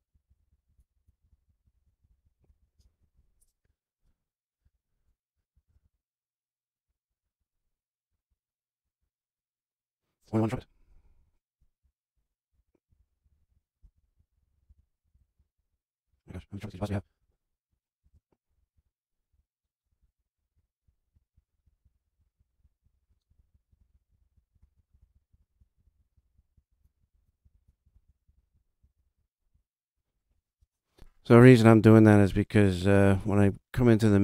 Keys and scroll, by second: 0.2 super+Left, 0.3 Delete, 0.5 super+Down, 0.6 super+Left, 0.7 Delete, 0.9 Delete, 1.1 super+Left, 1.2 Delete, 1.4 super+Down, 1.5 super+Left, 1.6 Delete, 1.9 super+Left, 2.0 Delete, 2.3 super+Left, 2.4 Delete, 2.6 super+Down, 2.7 super+Left, 2.7 Delete, 3.0 super+Down, 3.1 super+Left, 3.6 Return, 4.5 Up, 5.2 Return, 5.4 Left, 5.6 Delete, 5.8 super+Up, 6.8 super+Up, 7.0 super+Down, 8.0 super+Up, 8.9 super+Right, 10.1 -, 10.4 super+1, 10.4 super+Down, 10.7 super+Left, 10.8 Right, 11.5 e, 11.7 Right, 12.1 2, 12.8 super+Left, 12.9 Delete, 13.1 Right, 13.7 3, 13.9 super+Up, 14.1 super+Left, 14.2 Right, 14.6 Delete, 14.7 super+Up, 14.9 super+Right, 15.0 Left, 15.1 Delete, 16.0 super+Right, 16.3 4, 16.5 Left, 17.1 super+Delete, 17.1 super+Down, 17.6 super+Right, 18.0 Left, 18.4 Delete, 18.7 super+Down, 19.2 super+Left, 19.5 super+Right, 19.8 super+Down, 19.9 Left, 20.1 Up, 20.2 Delete, 20.5 super+Down, 20.7 super+Left, 20.8 Delete, 21.1 super+Down, 21.2 super+Left, 21.3 Delete, 21.6 super+Down, 21.7 super+Left, 21.8 Delete, 22.3 super+Left, 22.4 Delete, 22.6 super+Down, 22.7 super+Left, 22.8 Delete, 23.2 super+Left, 23.3 Delete, 23.6 super+Left, 23.7 Delete, 23.9 super+Down, 24.0 super+Left, 24.1 Delete, 24.4 super+Left, 24.5 Delete, 24.8 super+Left, 24.9 Delete, 25.1 super+Down, 25.2 super+Left, 25.3 Delete, 25.7 super+Left, 25.7 Delete, 25.9 super+Down, 26.1 super+Left, 26.1 Delete, 26.3 super+Down, 26.5 super+Left, 26.6 Delete, 26.9 super+Left, 27.0 Delete, 27.3 super+Left, 27.4 Delete, 27.7 super+Left, 27.8 Delete, 28.0 super+Down, 28.2 super+Left, 28.3 Delete, 28.7 super+Left, 28.9 Delete, 29.1 Down, 33.3 super+=.